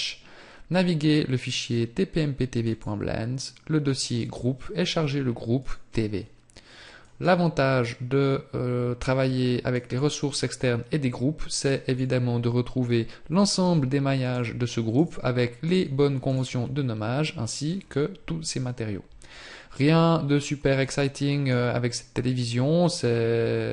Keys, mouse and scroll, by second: 7.3 click, 13.4 click, 17.8 scroll up 1, 19.5 middle click.